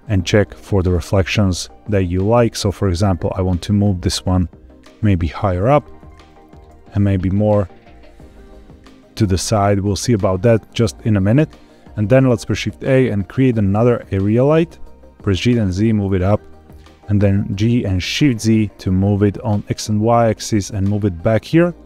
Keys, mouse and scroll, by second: 0.8 g, 1.1 y, 1.5 x, 2.8 y, 6.2 click, 6.6 g, 6.8 x, 9.1 click, 9.5-9.8 scroll down 3, 10.1 shift+middle click, 12.1 shift+a, 15.2 g, 15.4 z, 16.5 click, 17.5 g, 18.2 shift+z, 21.3 click.